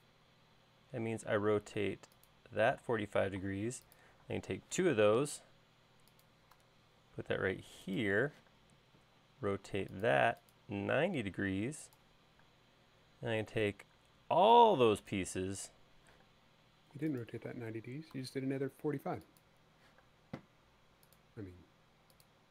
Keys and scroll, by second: 3.3 space, 5.3 m, 8.9 q, 13.1 space, 16.8 m, 20.5 q.